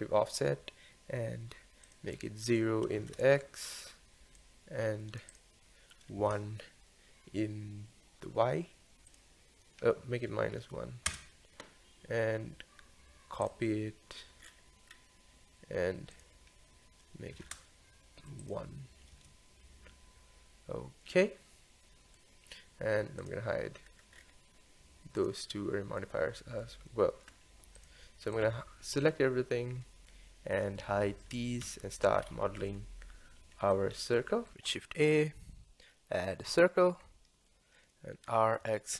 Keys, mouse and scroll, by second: 1.9-12.1 drag, 13.4 click, 14.4-16.0 scroll down 5, 16.1-21.0 drag, 21.0-23.2 middle drag, 23.2 click, 23.9-24.3 scroll up 7, 25.2 click, 26.1-27.8 middle drag, 27.8 click, 28.3 drag, 29.8-31.6 middle drag, 31.6 h, 32.2-32.8 scroll up 4, 32.8-33.9 shift+middle drag, 33.9-34.3 scroll up 1, 34.3 shift+middle click, 34.5 click, 34.7 shift+a, 37.0-37.5 scroll up 1, 37.5-38.3 shift+middle drag, 38.3 r.